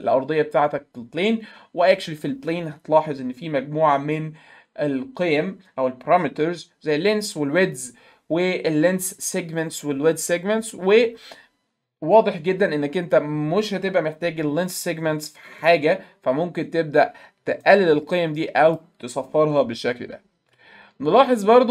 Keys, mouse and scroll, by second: 15.6 right click, 17.6 right click, 18.7 click, 20.6 alt+middle click.